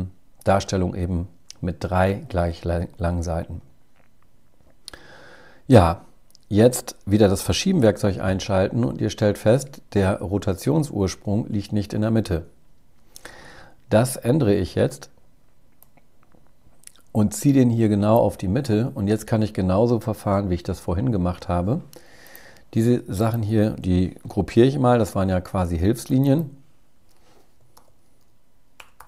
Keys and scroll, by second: 23.5 super+g.